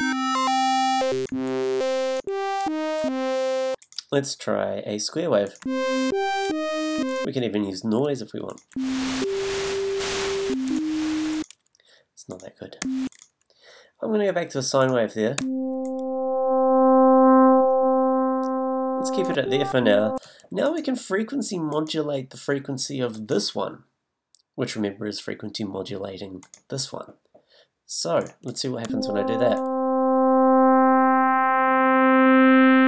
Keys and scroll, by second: 1.3 a, 2.6 e, 4.0 a, 5.6 a, 6.4 e, 8.7 a, 10.4 a, 12.8 a, 15.4 a, 19.4 g, 28.9 a.